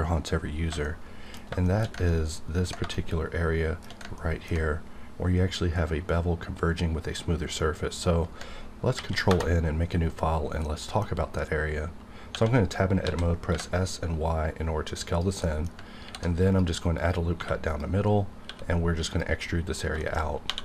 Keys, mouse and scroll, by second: 0.9 scroll down 1, 1.6 shift+middle click, 7.8 scroll down 1, 9.0 ctrl+n, 9.2 Return, 10.6-12.3 middle drag, 12.3 Tab, 13.0 s, 13.5 y, 15.1 click, 15.1 click, 15.4 middle click, 15.4 middle click, 16.0 ctrl+r, 16.4 click, 17.3 3, 17.7 click, 18.0-18.4 scroll up 1, 18.4 e, 19.1 click, 19.4 middle click, 20.0 shift+middle click, 20.2 scroll up 1, 20.5 2.